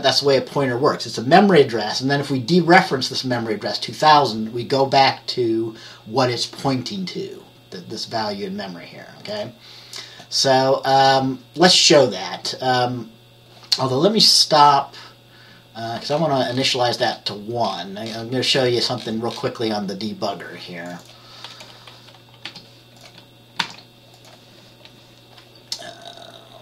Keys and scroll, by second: 22.5 1, 23.7 ctrl+s.